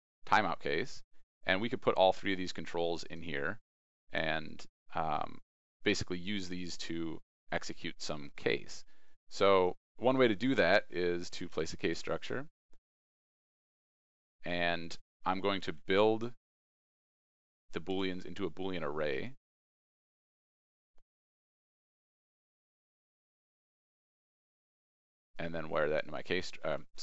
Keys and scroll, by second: 10.5 ctrl+space, 14.7 ctrl+space.